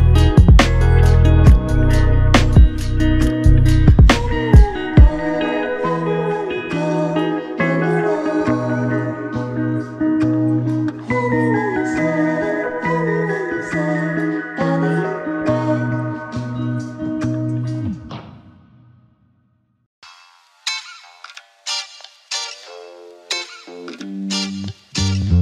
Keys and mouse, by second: 2.3 alt+click, 5.3 ctrl+click, 8.4 alt+click, 11.2 double click, 20.2 double click, 23.9 shift+click.